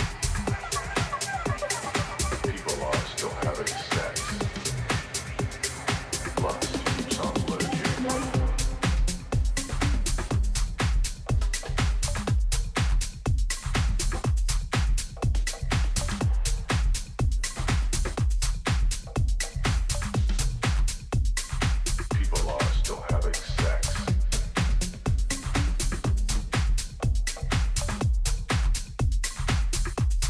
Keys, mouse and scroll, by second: 1.7 z, 4.4 shift+a, 8.0-9.3 middle drag, 9.3-11.2 drag, 14.1-17.0 drag, 19.6-21.9 middle drag.